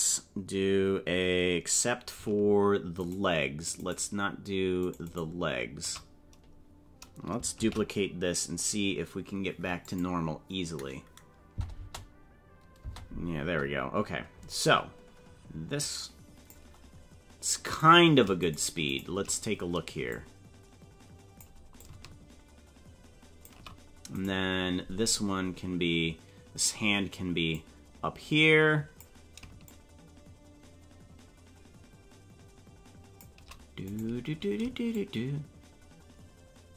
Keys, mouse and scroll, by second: 3.2 shift+right click, 4.1 shift+right click, 5.1 shift+right click, 5.2 shift+right click, 7.6 shift+d, 11.7 space, 12.9 space, 15.8 click, 17.8 right click, 19.0 shift+right click, 20.1-21.4 drag, 21.8-23.6 shift+drag, 24.3 right click, 25.1-26.8 drag, 27.6-29.0 drag, 29.7-33.3 shift+drag, 34.0 right click, 34.9-36.7 shift+drag.